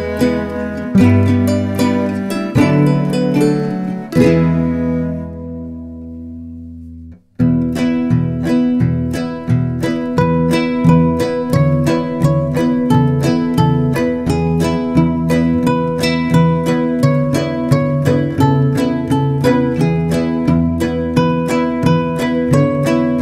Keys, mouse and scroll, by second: 2.8-5.9 drag, 6.8 click, 8.0 shift+middle click, 8.5 scroll down 2, 8.6 click, 9.4 scroll up 2, 9.5 click, 9.9 click, 10.2 click, 10.3 click, 10.7 shift+middle click, 11.0 click, 11.2 scroll down 3, 11.3 shift+middle click, 11.4-13.4 typing, 11.9 shift+middle click, 12.3 click, 12.9 scroll up 1, 13.0 scroll down 1, 13.1 click, 13.6 Tab, 13.8-15.2 drag, 15.3 Tab, 15.5 click, 16.4 shift+middle click, 16.5 Tab, 17.2 click, 17.4-23.2 typing, 18.0 click, 18.5 click, 18.8 click, 18.9 click, 19.5 click, 20.5 click, 21.3 shift+middle click, 21.4 click, 22.0 click, 22.9 click.